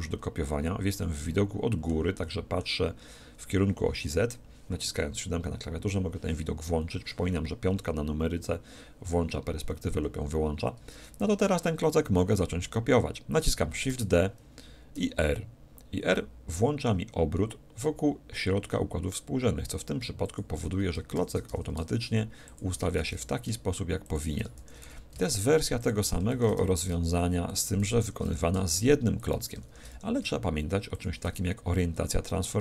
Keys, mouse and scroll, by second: 1.0-4.2 middle drag, 5.1 KP_7, 7.7 KP_5, 9.0 KP_5, 9.6 KP_5, 9.9 KP_5, 13.9 shift+d, 20.4-22.1 drag, 21.2 shift+d, 22.6-30.9 drag, 23.0 shift+d, 24.6 shift+d, 26.3 shift+d, 28.0 shift+d, 29.7 shift+d, 31.0-32.6 drag.